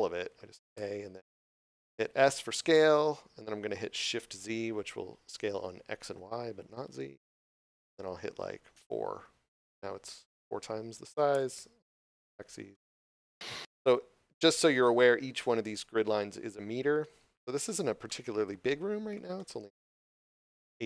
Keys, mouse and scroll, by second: 0.6 a, 2.6 s, 9.0 4, 11.2 Return, 12.6 middle click, 14.7 shift+middle click, 15.6 scroll up 1, 18.0 middle click.